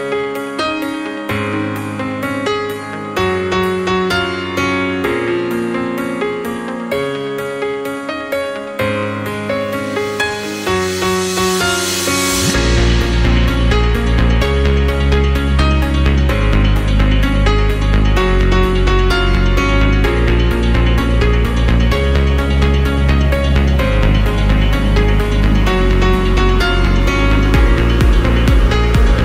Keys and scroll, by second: 21.5-22.4 typing, 26.3 0, 27.5 Up.